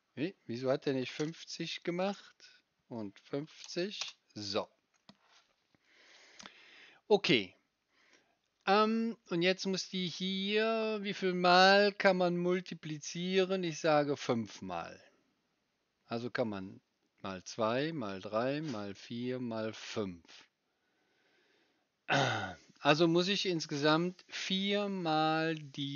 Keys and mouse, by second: 1.7-6.2 drag, 6.2-25.9 right drag.